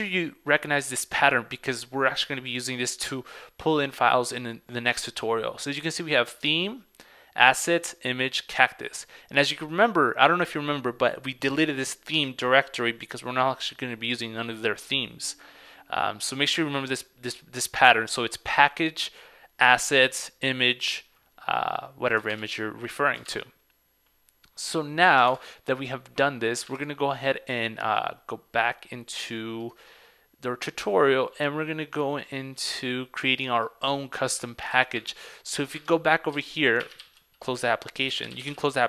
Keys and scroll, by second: 22.4 super+Tab, 25.4 super+Tab, 26.8 super+Tab, 29.8 Up, 34.8 super+c, 35.9 super+Tab, 37.1 ctrl+c.